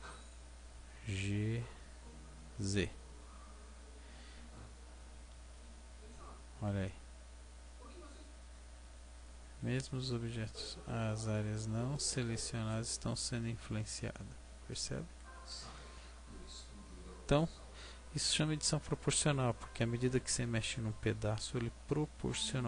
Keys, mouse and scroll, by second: 1.0 g, 12.8 click, 13.3 middle click, 18.0 scroll up 3, 18.8-19.4 scroll down 1.